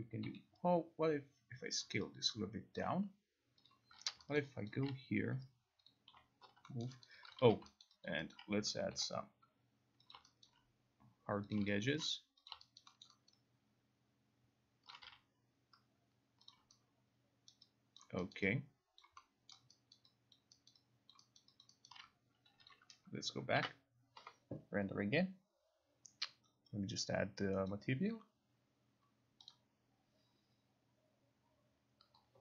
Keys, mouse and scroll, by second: 0.4 t, 1.9 click, 2.8 alt+click, 3.8 click, 4.0 ctrl+a, 4.5 alt+right click, 4.8 alt+click, 6.0 click, 6.2 Delete, 6.9 alt+middle click, 7.1 alt+click, 7.4 alt+right click, 7.6 click, 7.6 q, 7.9 alt+right click, 8.2 alt+click, 8.8 alt+right click, 8.9 k, 10.2 click, 10.5 alt+right click, 11.6 click, 11.9 alt+click, 12.6 click, 12.9 alt+right click, 13.1 alt+middle click, 13.4 alt+right click, 15.0 alt+click, 15.1 q, 16.6 click, 17.6 alt+right click, 18.0 alt+click, 19.1 alt+right click, 19.6 alt+click, 20.0 alt+middle click, 20.4 alt+right click, 22.2 alt+click, 22.8 click, 23.5 click, 23.6 ctrl+r, 27.8 click, 29.6 click.